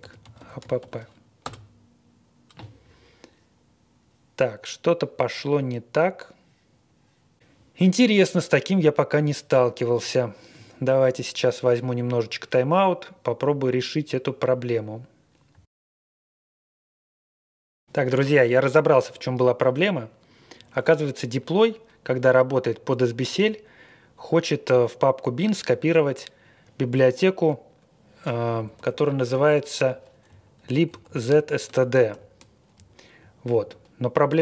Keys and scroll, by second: 0.0-0.7 typing, 1.4 Return, 28.7 alt+p, 28.9 alt+p, 29.3 alt+p, 30.3 shift+Tab, 30.5 alt+p, 30.5 Left, 30.5 Left, 30.6 Left, 30.9 Left, 31.0 Left, 31.3 Right, 31.4 Right, 32.1 ctrl+k, 32.7-33.5 Left.